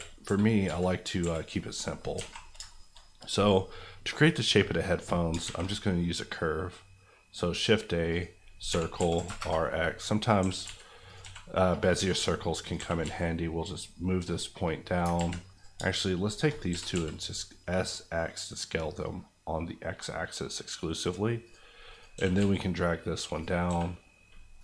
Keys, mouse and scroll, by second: 0.2 KP_5, 0.6 KP_3, 1.2 KP_1, 2.1 alt+KP_1, 2.1 alt+a, 2.3-2.7 scroll down 2, 2.7 shift+middle click, 5.4 shift+a, 8.1 click, 8.7 r, 8.9 x, 9.1 KP_9, 9.2 KP_0, 9.3 KP_Enter, 10.4 g, 10.6 z, 11.0 click, 11.2 s, 11.8 click, 12.0 Tab, 12.6 click, 12.7 g, 13.0 z, 14.3 click, 15.1 ctrl+z, 15.5 click, 16.7 s, 16.9 x, 21.4 click, 22.1 g, 22.3 z, 23.3 click, 23.6 s, 24.5 right click.